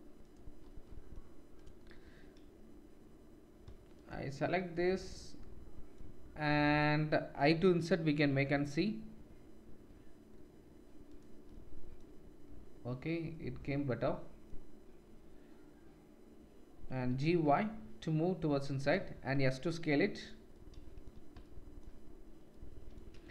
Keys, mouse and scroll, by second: 0.2 shift+click, 1.0 click, 1.5 middle click, 1.6-18.8 drag, 13.9-16.9 middle drag, 16.9 g, 19.3 5.